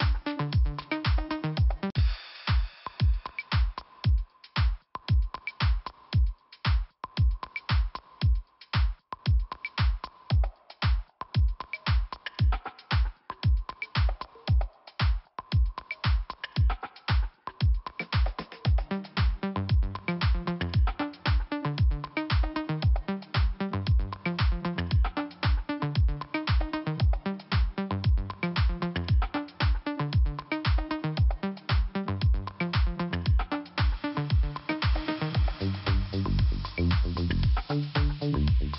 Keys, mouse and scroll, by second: 0.7 click, 1.3 click, 3.0 click, 3.7 click, 4.0 click, 4.3 click, 4.5 double click, 4.6 double click, 5.0 double click, 5.6 double click, 6.6 click, 8.0 click, 8.6 click, 9.1 click, 10.7 click, 10.7 click, 11.2 click, 13.5 click, 14.2 click, 15.4 click, 16.8 click, 17.3 click, 17.3 double click, 17.7 double click, 19.1 click, 19.2 click, 19.7 click, 21.3 click, 25.4 click, 26.7 click, 26.8 click, 27.4 click, 28.1 click, 29.1 click, 29.3 click, 31.5 click, 32.4 scroll down 2, 34.0 click, 35.2 click, 36.5 click, 37.3 click, 38.6 click.